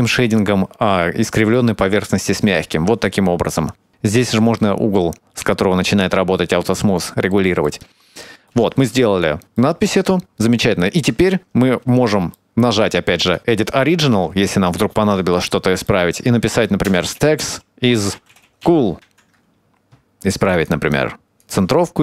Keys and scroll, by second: 16.8-19.0 typing.